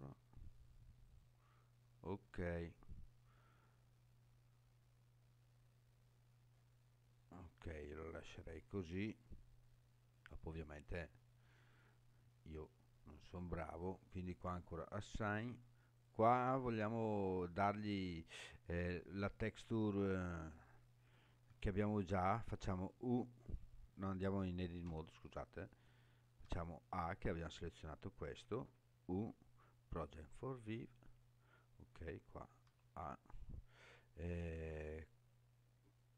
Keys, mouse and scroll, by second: 1.0 click, 1.8-2.4 scroll down 5, 5.4-6.0 scroll down 4, 6.0-6.6 scroll up 5, 7.4-8.2 scroll up 5, 9.7-10.2 scroll down 4, 11.8-14.5 scroll down 2, 14.5 click, 15.2 Tab, 16.0 click, 22.6 u, 24.9 Tab, 26.5 a, 28.6 u, 32.6 a.